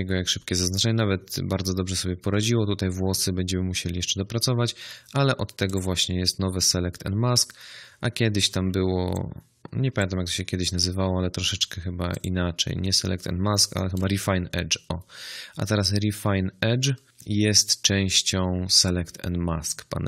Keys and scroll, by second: 8.5 z, 10.7 w.